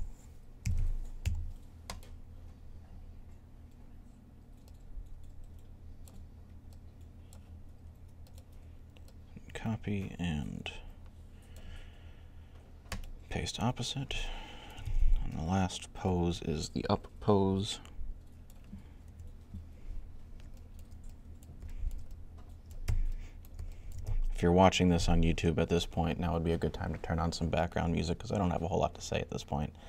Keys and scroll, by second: 0.3-1.6 typing, 18.9 3.